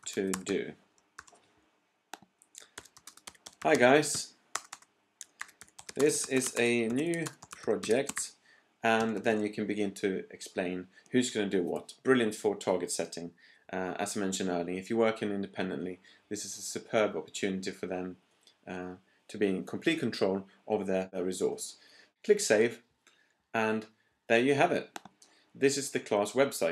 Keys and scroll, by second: 0.0-1.1 typing, 2.5-9.2 typing.